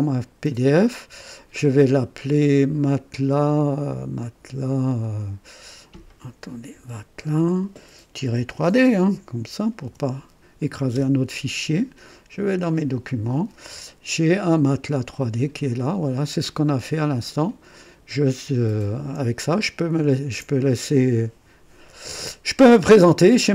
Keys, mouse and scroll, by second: 2.8 click, 5.0 click, 6.7 BackSpace, 8.2 -, 8.8 KP_3, 9.8 d, 10.9 Return, 11.0-13.9 typing, 12.8 click, 15.0 click, 16.6 scroll down 1, 17.3 right click, 17.7-18.5 typing, 18.5 scroll down 1, 19.7 ctrl+scroll down 1.